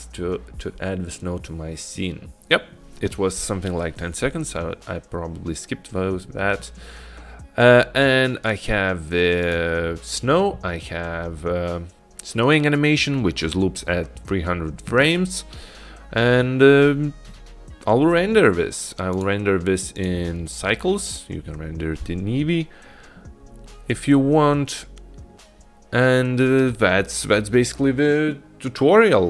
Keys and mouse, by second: 8.6 click, 9.6 click, 20.0-21.4 drag.